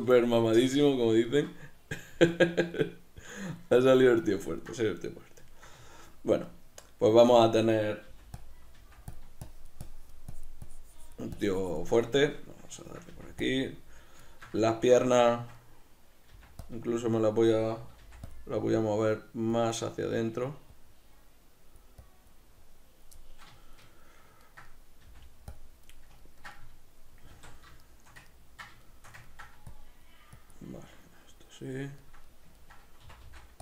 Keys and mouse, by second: 2.2 Tab, 2.8 ctrl+middle click, 4.0-8.5 middle drag, 8.2 f, 8.5 click, 8.8 f, 9.6-12.2 shift+drag, 12.2-13.6 shift+middle drag, 13.2 f, 13.6 click, 13.8-16.8 middle drag, 16.4 f, 16.8 click, 17.5 g, 18.9-22.6 drag, 22.6-23.6 middle drag, 25.1 f, 25.7 click, 25.9 middle click, 27.4 alt+q, 27.9 shift+middle click, 29.8-31.6 drag, 31.6-33.6 middle drag, 33.1 c.